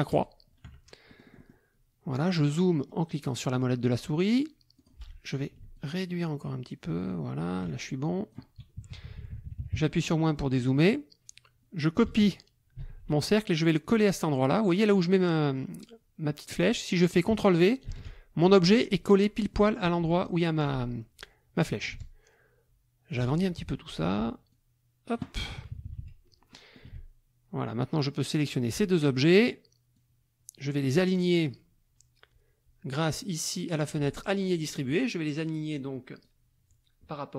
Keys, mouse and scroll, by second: 0.1 shift+click, 1.1 shift+middle click, 2.8 middle click, 4.8 click, 5.7-7.7 ctrl+shift+drag, 7.8 ctrl+shift+click, 8.8 KP_Subtract, 10.4 click, 12.7 ctrl+c, 17.9 ctrl+v, 19.5-20.6 drag, 21.9-23.3 ctrl+shift+drag, 23.6 ctrl+shift+KP_Subtract, 24.5 click, 25.4 KP_Subtract, 26.5 click, 28.5 shift+click, 30.0-31.1 drag, 34.5 click, 36.2-37.3 drag.